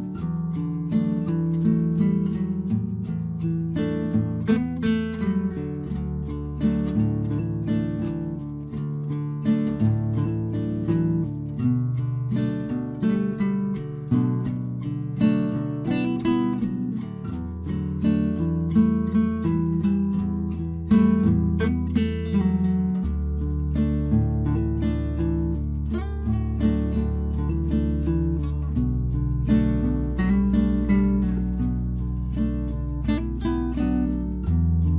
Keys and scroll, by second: 6.2 Return, 11.2 ctrl+t, 15.5 Return, 23.5 ctrl+j, 24.6 ctrl+t, 33.9 Return.